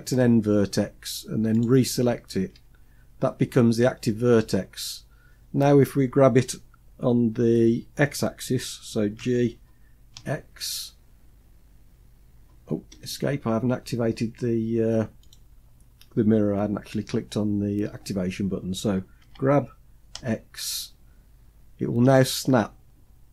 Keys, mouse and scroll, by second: 1.0 shift+click, 8.6 g, 14.7 click, 18.6 g.